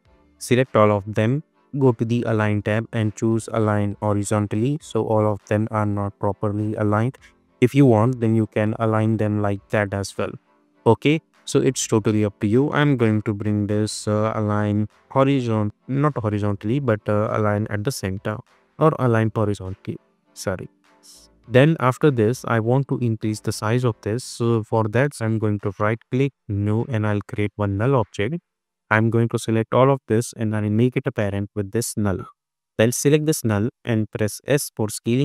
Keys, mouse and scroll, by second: 5.6-7.8 scroll up 1, 8.1 click, 14.6 click, 20.1 click, 25.5 right click, 26.5 click, 30.3-31.3 drag, 34.5 s.